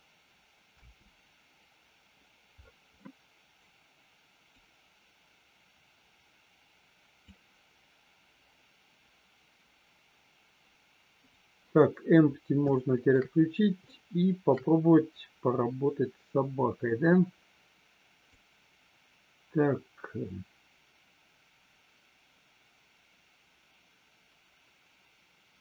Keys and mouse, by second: 0.8 space, 3.0 middle click, 4.5-7.3 drag, 12.7 shift+middle click, 13.8-14.4 shift+middle drag, 18.4-25.6 drag.